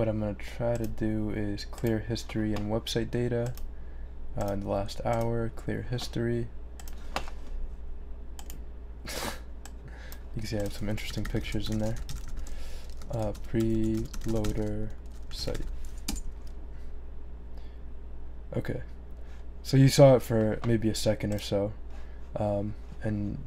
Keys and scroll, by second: 10.8-16.0 typing, 16.1 Return.